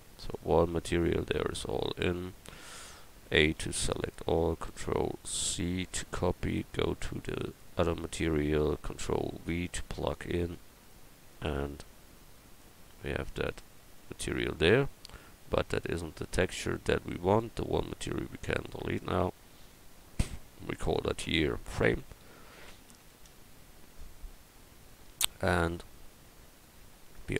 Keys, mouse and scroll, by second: 3.3 a, 3.6 a, 6.0 ctrl+c, 9.5 ctrl+v, 13.1 x, 25.1-26.2 middle drag.